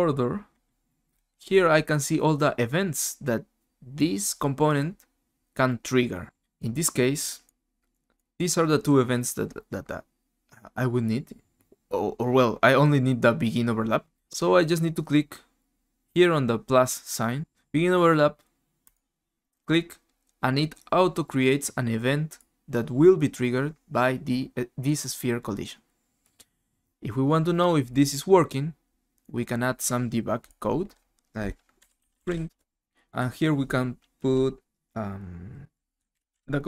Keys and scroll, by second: 31.5-32.7 typing, 35.7-36.6 typing.